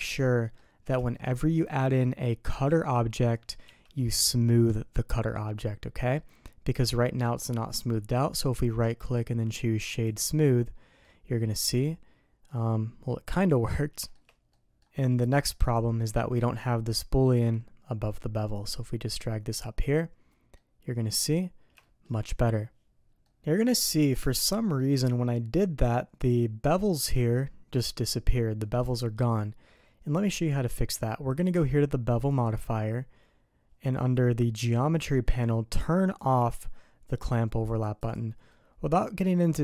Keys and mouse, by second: 0.3 drag, 1.1 shift+click, 2.5 g, 8.8-10.3 drag, 11.0-13.3 middle drag, 14.0 shift+middle click, 14.5 middle click, 15.6 click, 19.1-19.8 drag, 20.5 click, 21.8 shift+click, 23.2 middle click, 24.4 shift+middle click, 24.6 shift+click, 26.1 click, 28.8 click, 29.3-30.5 middle drag, 32.3 click, 36.2 click, 37.6 click, 38.0 click, 38.4 middle click, 39.0-39.6 drag.